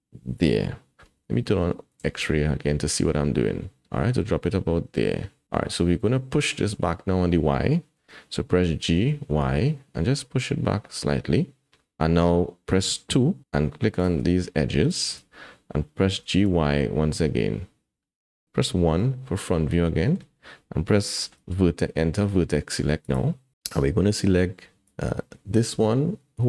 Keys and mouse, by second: 2.0 alt+z, 5.8 middle click, 8.5 g, 13.1 2, 16.1 g, 18.9 KP_1, 19.9 shift+click, 21.2 shift+click, 23.0 click, 24.8 click.